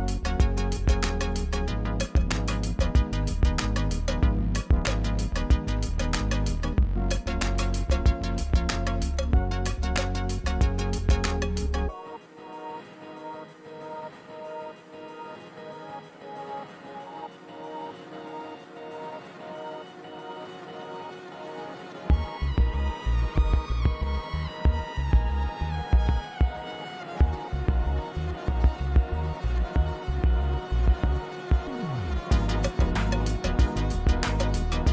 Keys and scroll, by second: 2.8 g, 3.1 shift+z, 11.1 f, 12.4 e, 12.8 4, 14.3 a, 14.6 f, 15.0 Return, 16.6 5, 16.9 0, 17.8 Return, 20.1 1, 20.5 Return, 23.4 shift+z, 26.1 shift+z, 28.5 g, 28.7 y, 30.3 shift+z, 32.1 g, 32.4 z.